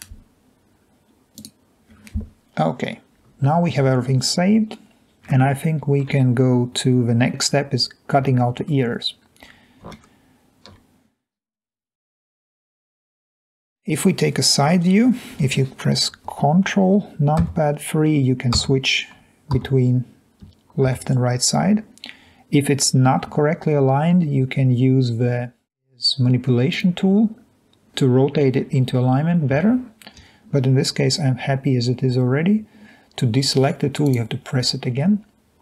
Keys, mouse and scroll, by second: 1.4 click, 6.1 alt+Tab, 9.2 scroll down 1, 10.7 alt+Tab, 12.4 3, 19.7 3, 30.3 Escape.